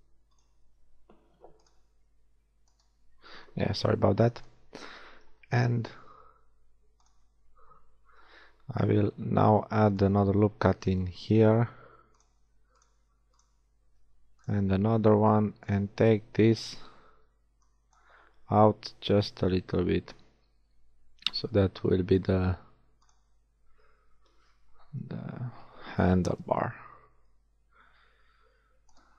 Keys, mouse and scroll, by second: 2.7-4.4 right drag, 4.1 b, 5.4 g, 7.5 a, 9.1 ctrl+r, 12.2 click, 12.4 ctrl+r, 12.8-14.4 drag, 14.0 ctrl+r, 16.8 a, 17.3 b, 19.3 g, 24.1 a, 26.7 ctrl+r.